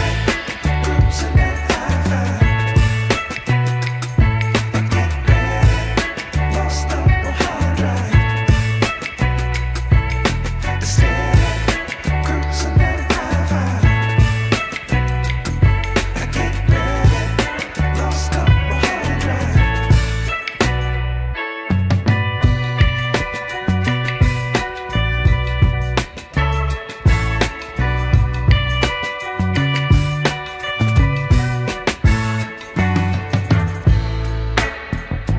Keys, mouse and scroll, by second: 1.0 shift+a, 8.7 r, 10.9 Delete, 11.6 shift+a, 16.3 click, 17.1-18.6 drag, 20.7 r, 24.3 s, 27.5-27.9 scroll up 2, 27.9 shift+middle drag, 28.3-28.8 scroll up 2, 28.8 shift+middle drag, 29.3 middle click, 30.7 s, 33.0 Tab, 33.7 click, 34.5 3, 34.7 click.